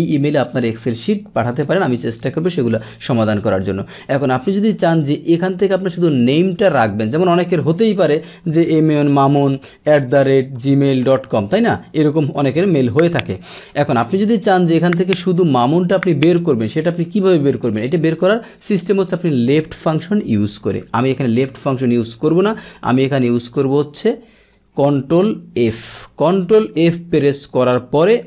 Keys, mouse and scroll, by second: 4.7-5.7 drag, 7.4 click, 12.4 BackSpace, 15.1 click, 18.1 click, 21.4 click, 22.4 Delete, 23.8 click, 25.5 ctrl+f, 26.8 click.